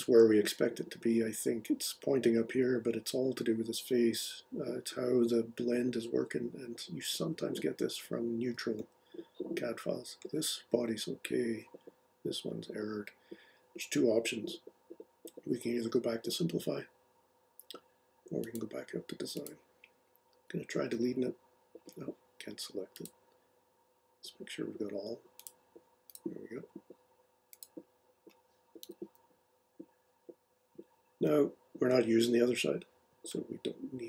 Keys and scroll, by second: 28.8 Delete.